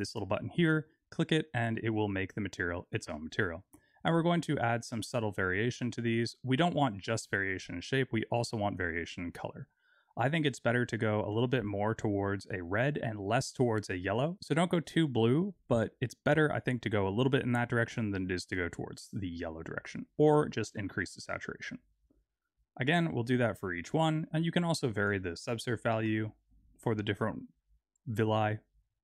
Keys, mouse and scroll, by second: 1.5 click, 3.5 click, 22.7 click, 23.9 click, 25.0 click, 27.6 click.